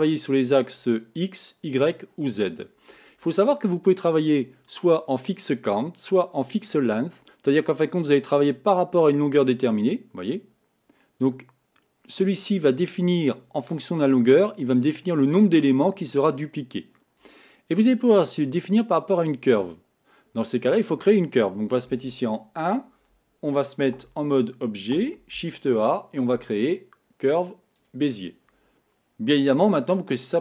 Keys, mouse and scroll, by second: 0.8 click, 4.5-7.6 drag, 8.6-11.6 drag, 12.8-14.1 scroll down 5, 14.1-17.1 drag, 18.1-21.1 drag, 21.9 KP_1, 24.0 Tab, 25.3 shift+a.